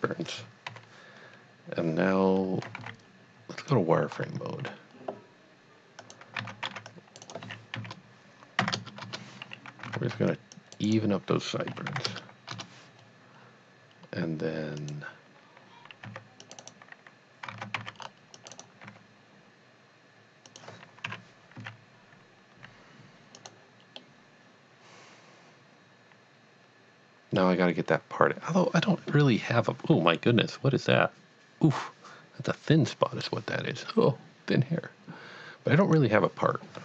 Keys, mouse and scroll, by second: 0.7 KP_3, 2.8 z, 3.6 click, 4.1 scroll up 1, 6.0 click, 6.4 alt+a, 6.6-8.8 typing, 6.9 click, 7.2 right click, 9.0 KP_Enter, 9.9 alt+a, 10.1 c, 10.6 click, 10.8 right click, 11.7 s, 12.1 KP_0, 12.5 KP_Enter, 13.4 scroll down 1, 14.8 click, 16.1 c, 16.5 right click, 17.8 c, 18.0-18.4 scroll up 1, 18.4 click, 18.5 right click, 18.9 g, 20.5 click, 21.1 KP_Divide, 21.7 z, 23.4 click, 24.0-27.5 middle drag, 35.8 click.